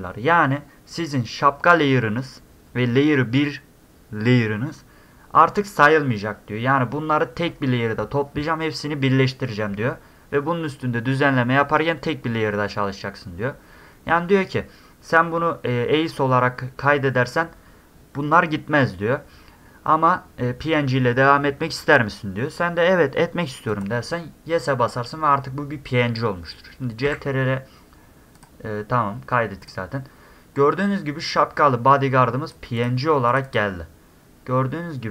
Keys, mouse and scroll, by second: 23.7 click, 27.1 ctrl+s, 28.4 click, 29.6 click, 31.3-32.5 drag, 32.8 click, 33.3 click, 33.5 click.